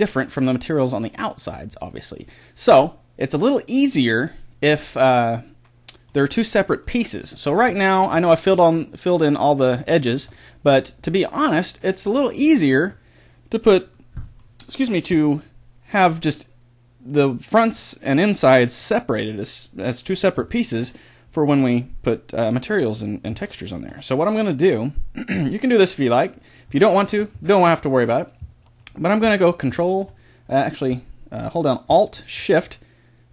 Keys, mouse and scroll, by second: 3.4-7.4 middle drag, 17.7 middle click, 18.2-20.2 middle drag, 26.3 middle click.